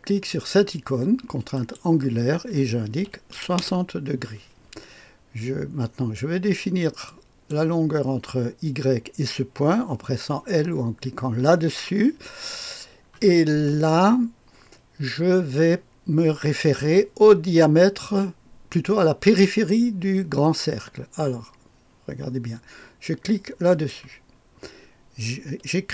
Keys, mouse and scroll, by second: 1.5 click, 3.0 KP_6, 3.3 KP_0, 3.6 Return, 7.0-8.1 drag, 11.4 i, 23.7 click.